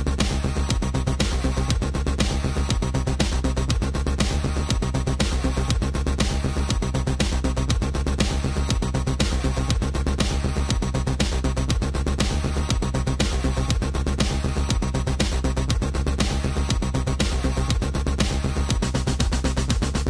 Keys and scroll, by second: 15.3 space.